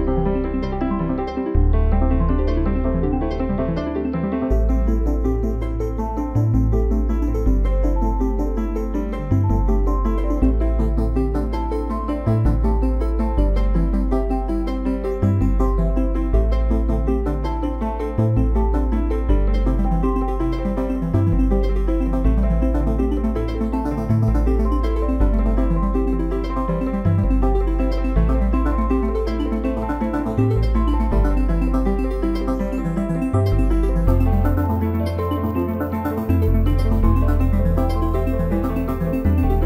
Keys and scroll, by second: 23.8 ctrl+j.